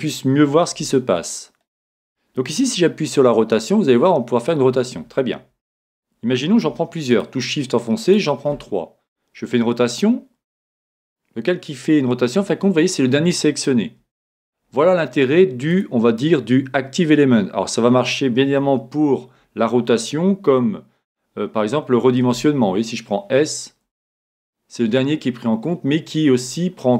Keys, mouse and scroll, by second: 3.2 r, 7.1 right click, 9.8 r, 15.7-17.6 drag, 18.6 Escape, 22.2 s.